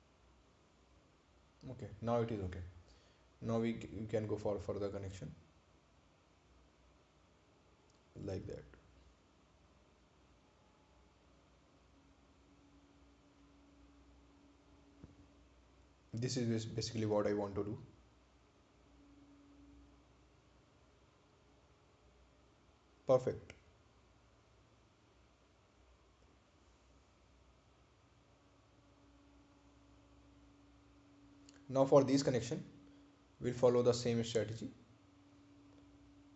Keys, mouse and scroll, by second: 1.7 click, 6.1 click, 11.8 click, 17.8 click, 18.8 scroll down 1, 21.3 scroll up 1, 22.3-23.0 scroll down 1, 23.1 right click, 24.0 ctrl+click, 30.1 click, 33.7 click.